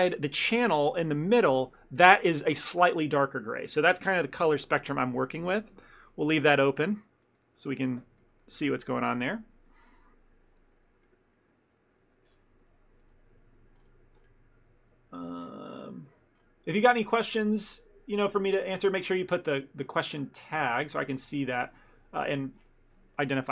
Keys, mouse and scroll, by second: 5.7 ctrl+space, 6.5 ctrl+middle click, 8.3 shift+middle click.